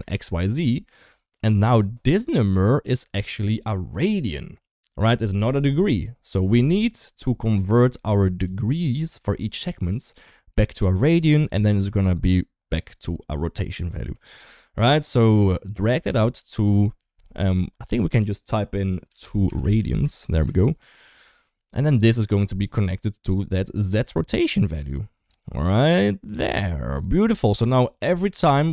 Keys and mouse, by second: 1.3 shift+middle click, 3.5 shift+middle click, 6.8-7.7 drag, 7.9 click, 9.8-10.6 drag, 11.4 shift+middle click, 13.9 shift+middle click, 15.2-21.8 drag, 22.3 middle click, 22.8 click, 23.7 click, 23.9-25.1 drag, 25.5-26.2 drag, 27.2 click, 27.7 middle click.